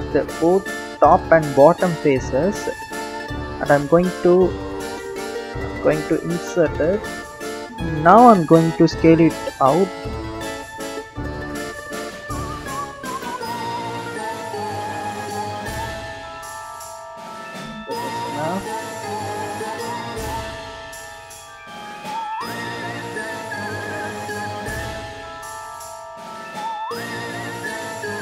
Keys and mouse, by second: 0.7 s, 4.9 s, 9.4 click, 11.6 d, 12.0 z, 14.3 s, 18.7 click, 21.8-23.3 drag, 26.2 click, 28.1 click.